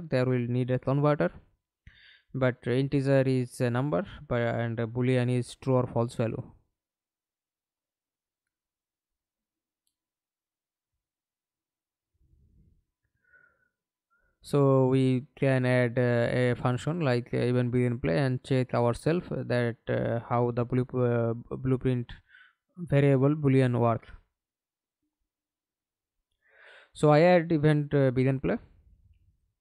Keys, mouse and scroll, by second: 3.7 Delete, 4.9 Delete, 10.1-10.4 scroll down 2, 10.4-12.9 scroll up 1, 19.2 right click, 20.5 Delete, 21.9 scroll up 1, 22.1 right click, 22.8-25.5 typing, 26.3 Return, 27.1-28.3 scroll up 3, 28.9 scroll up 3, 29.2 right click.